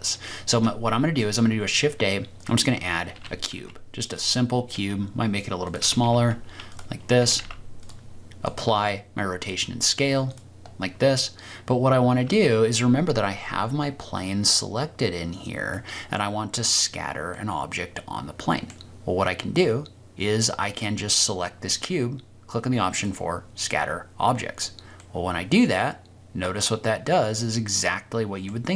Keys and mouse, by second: 0.5 shift+a, 3.1 g, 3.5 z, 4.0 drag, 4.7 s, 5.6 click, 5.8 g, 6.0 y, 6.7 click, 7.2 g, 7.7 z, 8.5-10.4 drag, 15.8 middle click, 17.3-18.7 drag, 17.3-18.7 middle drag, 25.0-28.4 middle drag, 27.9 click.